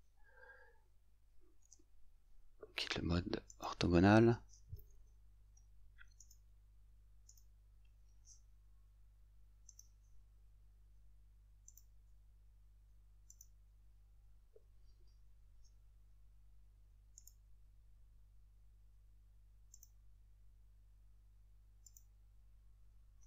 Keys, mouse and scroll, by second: 1.6 F8, 3.5 click, 6.3 right click, 9.7 click, 13.4 click, 17.2 right click, 19.8 click, 21.9 click.